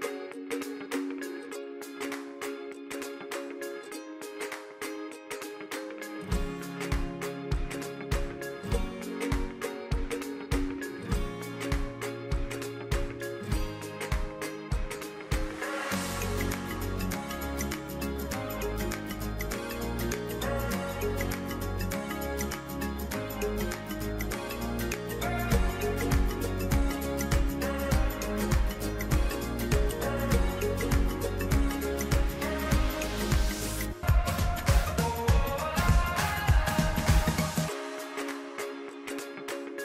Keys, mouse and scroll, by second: 1.8 click, 10.1-13.8 drag, 14.5 ctrl+Num_Lock, 14.5 click, 14.8 ctrl+], 15.5 typing, 16.7-17.2 typing, 19.3 typing, 20.7 click, 24.8 click, 29.3 click, 32.2-38.0 drag.